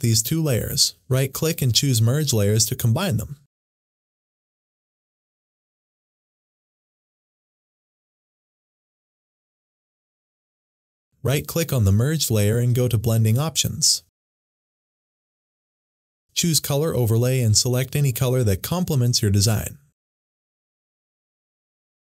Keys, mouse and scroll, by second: 2.2 right click, 5.2 click, 12.1 right click, 12.8 click, 15.2-16.4 drag.